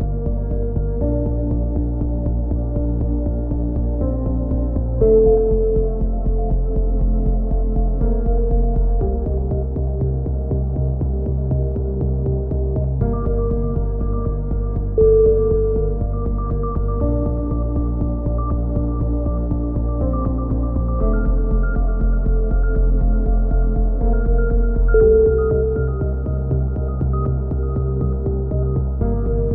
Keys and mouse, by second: 0.7 click, 2.3 a, 2.7 middle click, 3.5 click, 4.3 middle click, 5.1 click, 5.6 z, 6.2 click, 7.0 ctrl+z, 7.3 a, 7.6 c, 8.7-9.9 drag, 11.8 z, 12.2 z, 12.5 a, 13.1-15.8 drag, 15.8 a, 16.0 z, 16.3 middle click, 16.4 Tab, 17.2 click, 22.2 KP_3, 22.7-24.7 middle drag, 22.9 z, 24.2 ctrl+KP_7, 24.8 z, 25.5 z, 25.9 Tab, 26.1 z, 28.2 KP_7, 28.5 z.